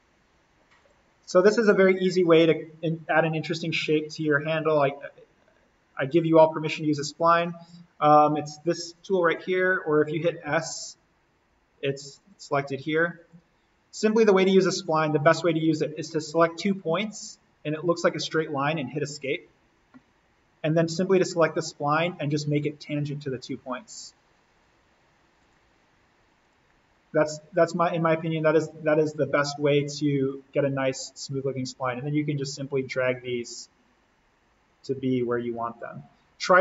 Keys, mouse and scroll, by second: 0.8 click, 10.4 s, 12.3 click, 16.1 click, 19.0 Escape, 20.8 click, 24.0 click, 29.4-36.6 drag.